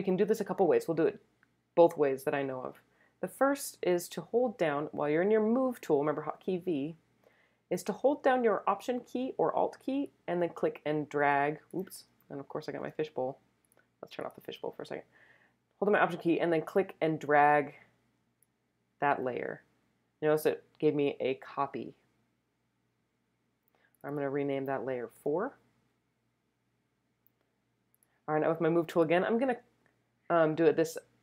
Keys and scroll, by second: 6.3 v, 12.8 super+z, 25.1 4.